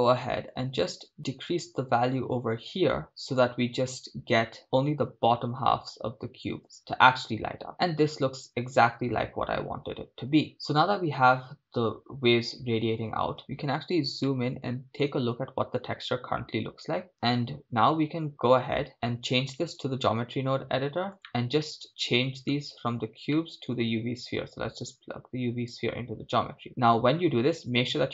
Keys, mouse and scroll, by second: 1.1-6.5 shift+drag, 6.8 shift+space, 13.5 scroll up 4, 13.5 KP_0, 14.3-15.2 shift+middle drag, 19.1-19.7 scroll down 3, 19.7-21.2 drag, 22.5 middle click, 26.1 click.